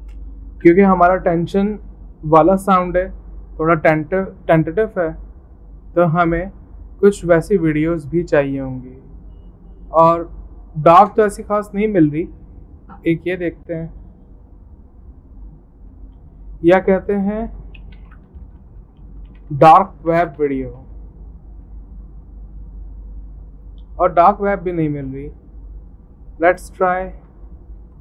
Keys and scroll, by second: 0.0-0.3 typing, 0.6 Return, 18.0-23.3 typing, 25.2-25.9 typing, 27.9-28.0 typing.